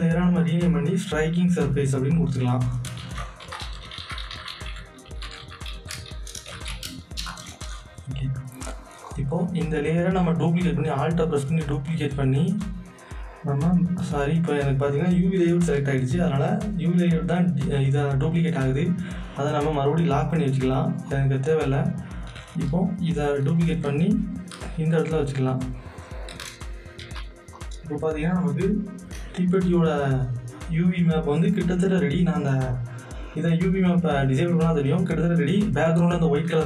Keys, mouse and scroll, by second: 0.4 click, 1.9 click, 2.7-7.2 typing, 7.2 Return, 9.0 click, 12.0-16.6 alt+drag, 17.1 alt+click, 19.4 click, 23.3-27.0 alt+drag, 27.0 z, 27.1 right click, 27.5 click, 33.7 click.